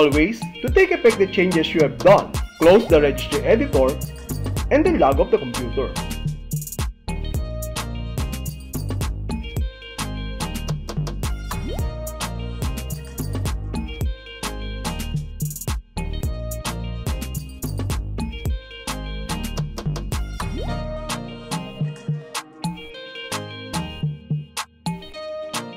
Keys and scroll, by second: 3.8 shift+t, 6.8 Left, 7.9 Left, 9.2 Left, 10.3 Left, 11.6 Left, 12.8 Left, 13.9 Left, 15.0 Left, 16.3 Left, 17.4 Left, 18.7 Left, 20.5 alt+f.